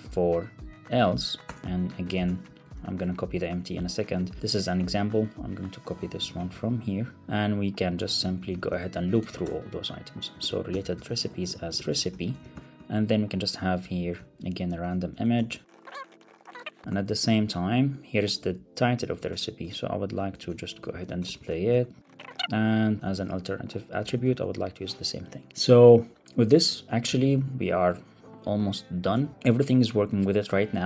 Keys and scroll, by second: 1.3 Return, 1.6 Right, 1.9 shift+Left, 2.2 Return, 2.7 super+Right, 3.2 Down, 3.5 super+Right, 4.0 Up, 4.2 super+v, 4.4 Return, 6.0 shift+Down, 6.2 shift+super+Right, 6.3 super+c, 7.2 super+v, 8.0 Up, 8.3 Left, 8.9 alt+shift+Right, 9.1 super+x, 9.3 super+BackSpace, 10.3 super+v, 12.1 alt+shift+Left, 12.3 super+c, 13.7 Down, 14.1 alt+Right, 14.6 Right, 15.0 shift+Left, 16.7 alt+super+l, 16.7 super+s, 16.8 super+1, 18.4 alt+Up, 19.1 Return, 20.3 Up, 20.8 ctrl+shift+j, 21.6 super+v, 22.4 super+s, 22.4 alt+super+l, 22.4 super+s, 22.9 alt+super+l, 23.0 super+s, 24.1 super+s, 26.9 alt+super+l, 27.0 super+s, 29.1 super+r.